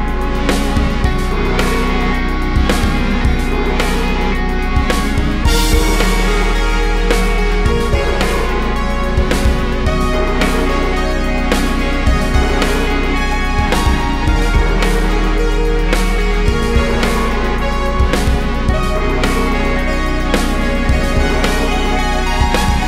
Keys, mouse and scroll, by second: 0.0 g, 2.0 `, 2.5 `, 3.5 Tab, 5.3-6.4 drag, 6.4 KP_7, 9.4-12.8 shift+drag, 11.1 a, 11.5 s, 13.6-17.4 drag, 15.8 `, 19.3 KP_7, 19.6 Tab, 19.7 a, 21.5 `, 22.0 KP_7, 22.7 shift+d.